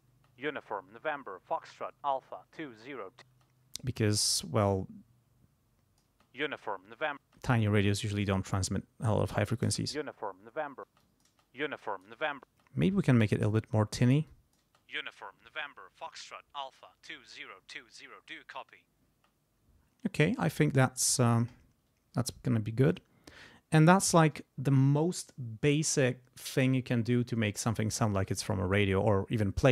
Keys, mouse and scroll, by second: 0.1 space, 3.2 space, 4.1-6.2 drag, 6.1 space, 7.2 space, 7.6 click, 9.6 space, 10.9 space, 11.0 click, 11.8 click, 12.5 space, 13.4-14.7 drag, 14.6 space, 19.1 space, 23.8 click.